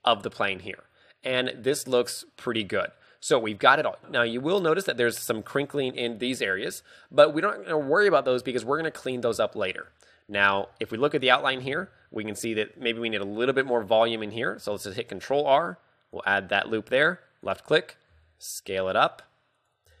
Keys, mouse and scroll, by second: 0.0 Tab, 0.0 click, 0.0 scroll down 4, 0.0 s, 0.2 middle click, 0.8 scroll up 2, 1.1 middle click, 1.8 middle click, 3.4 middle click, 4.0 scroll up 3, 4.4 shift+middle click, 4.5 shift+middle click, 4.6-6.0 scroll up 2, 6.0 scroll down 2, 6.6 KP_3, 7.0-7.6 scroll down 2, 8.4 z, 8.9 shift+middle click, 9.4 z, 10.6 z, 10.7 Tab, 11.7 z, 13.9 Tab, 14.8 ctrl+r, 17.8 click, 18.3 s, 19.8 click.